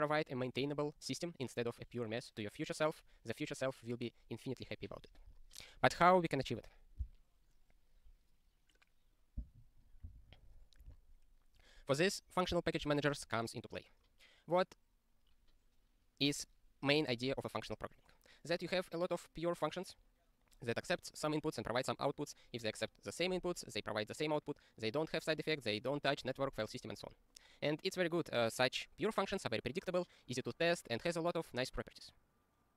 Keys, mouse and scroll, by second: 11.9 scroll down 1.